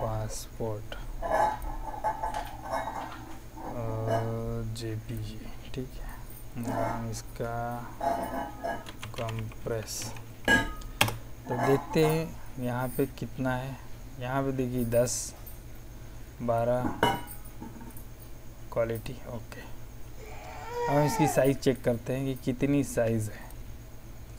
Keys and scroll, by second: 8.5-10.7 typing, 10.9 Return.